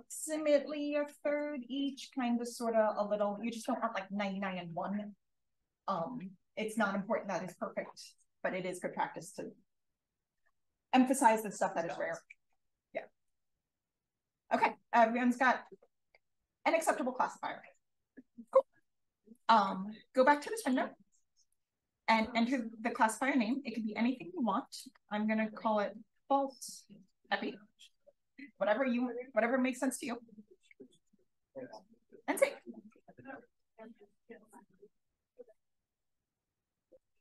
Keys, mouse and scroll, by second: 21.4 click, 23.2-27.5 typing, 31.3 click.